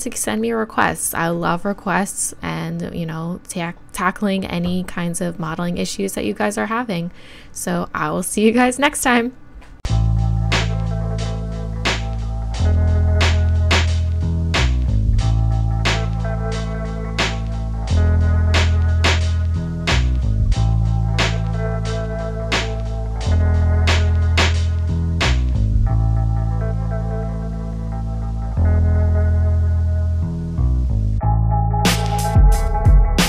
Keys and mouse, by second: 10.2 shift+a, 11.1 click, 12.9 n, 13.5 KP_1, 13.9 KP_5, 14.6 s, 15.5-16.1 drag, 16.1 s, 16.4 click, 16.6 Tab, 16.8 ctrl+r, 17.3 click, 17.8 s, 18.3 click, 19.0 e, 19.3 s, 19.7 click, 20.6 KP_1, 20.9 click, 21.1 KP_3, 21.3 z, 21.6 z, 22.3 right click, 22.7-26.2 typing, 24.3 click, 25.7 click, 26.7 click, 27.4-29.2 typing, 27.7 click, 29.5 click, 30.6-32.5 drag, 32.5 right click, 32.7 shift+e.